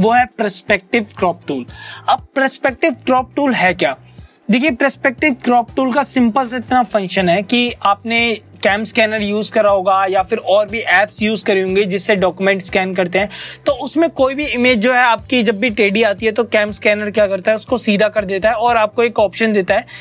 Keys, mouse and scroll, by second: 5.4 click.